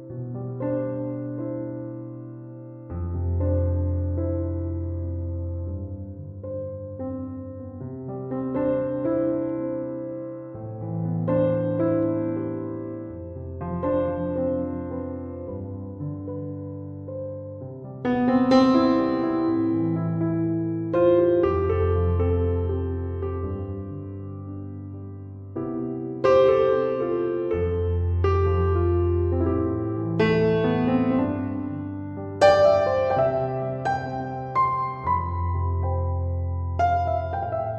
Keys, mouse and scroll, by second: 11.2 2, 11.4 Return, 18.1 BackSpace, 19.0 6, 19.3 5.